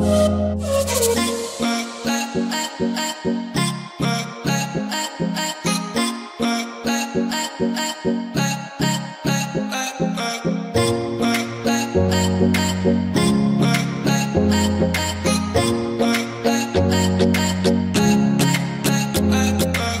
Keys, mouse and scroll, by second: 0.1 v, 0.2-7.5 drag, 7.5 Down, 8.4 click, 9.1-9.4 scroll up 1, 10.2 p, 11.4-14.1 drag, 14.1 ctrl+click, 15.4-19.3 alt+drag, 19.3 ctrl+z.